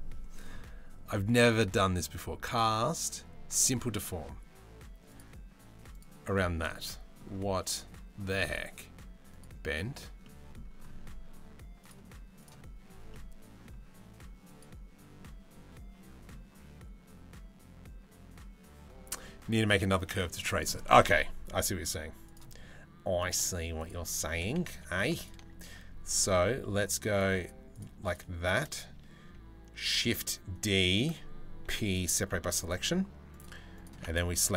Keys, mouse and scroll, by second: 6.2 middle click, 6.8 middle click, 8.9 middle click, 9.8 middle click, 11.4 click, 12.7 middle click, 14.0 middle click, 14.8-15.9 middle drag, 18.8-19.3 middle drag, 23.4 click, 23.8 Tab, 24.3 Tab, 24.8 click, 26.7 click, 26.7 2, 27.0 shift+click, 27.3 shift+click, 29.4 shift+d, 31.3 p, 31.9 Tab, 32.2 click, 33.3 click.